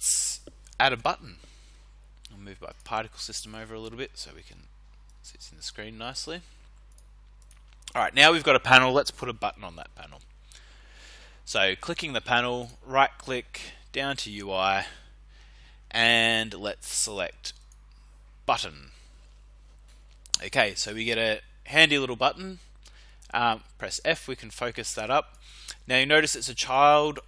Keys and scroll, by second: 3.7 f, 4.4 w, 23.2 f.